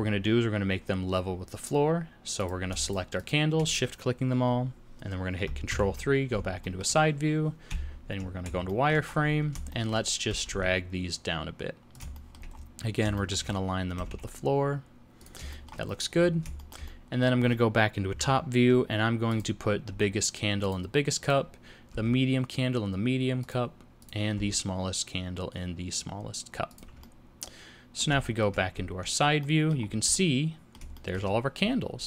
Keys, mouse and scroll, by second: 0.7 scroll down 2, 2.4 click, 2.8 shift+click, 3.2 click, 5.7 ctrl+KP_3, 6.6 shift+middle click, 7.7 z, 8.6 shift+middle click, 9.1-9.4 scroll up 3, 9.7 shift+middle click, 10.3 g, 12.1 shift+middle click, 12.5-12.9 scroll up 8, 13.1 shift+middle click, 13.5-14.1 scroll up 2, 13.9 g, 15.5 shift+middle click, 15.9-16.4 scroll down 12, 16.7 shift+middle click, 16.8 middle click, 18.1 KP_7, 19.3 click, 19.9 g, 21.2 click, 21.9 g, 24.0 click, 24.3 g, 27.0 middle click, 28.2 shift+middle click, 28.7 z, 29.4 middle click, 29.8 scroll up 3, 30.1 middle click, 30.9 shift+middle click.